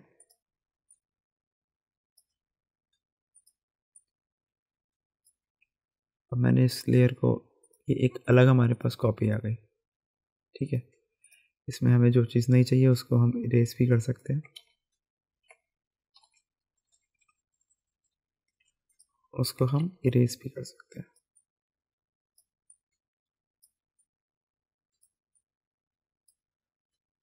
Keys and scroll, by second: 15.3-19.7 typing.